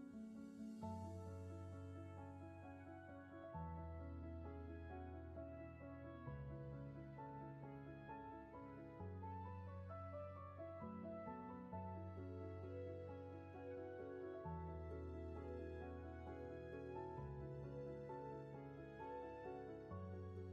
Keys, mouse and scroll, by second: 12.8 ctrl+z, 13.6 ctrl+shift+z, 15.7 ctrl+z.